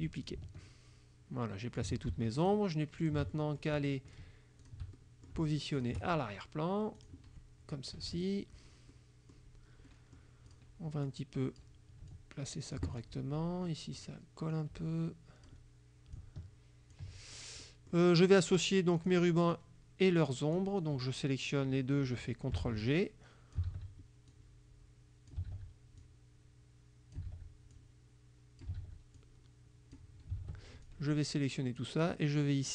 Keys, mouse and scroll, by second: 0.3-2.1 ctrl+drag, 2.5 shift+click, 3.1 shift+click, 4.2 shift+click, 4.7 shift+click, 5.8 shift+click, 7.0 click, 8.0 KP_Subtract, 9.0 click, 9.9 click, 10.3 click, 11.1 click, 12.2 ctrl+click, 13.8 click, 14.6 click, 16.2 ctrl+click, 17.4 ctrl+click, 17.7 ctrl+middle click, 19.1 click, 19.6-20.8 drag, 22.7 ctrl+g, 22.9 ctrl+click, 23.8 ctrl+g, 24.3-25.6 ctrl+drag, 25.6 ctrl+g, 26.1-27.4 ctrl+drag, 27.3 ctrl+g, 27.8 ctrl+click, 28.9 ctrl+g, 29.3 ctrl+click, 30.5 ctrl+g, 31.0 ctrl+click.